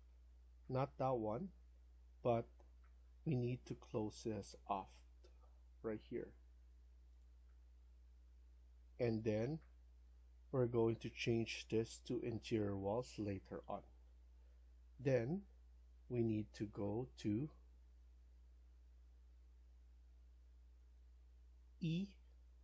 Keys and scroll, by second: 9.9 Escape.